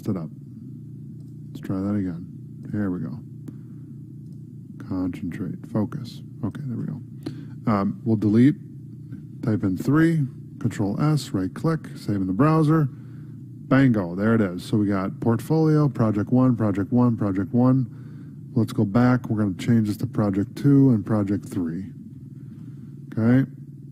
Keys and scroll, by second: 10.6 ctrl+s, 18.3 Tab, 22.6 ctrl+s.